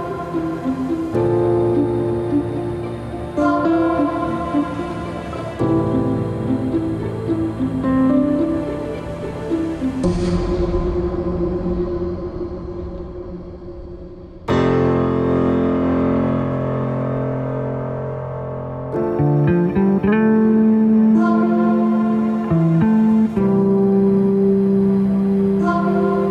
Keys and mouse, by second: 0.1 click, 2.6 click, 5.0 Tab, 5.9-6.4 middle drag, 6.8 click, 7.9 drag, 10.0 click, 10.8 shift+click, 11.4 alt+z, 11.9 shift+click, 12.7 shift+click, 15.2 middle click, 20.4 ctrl+b.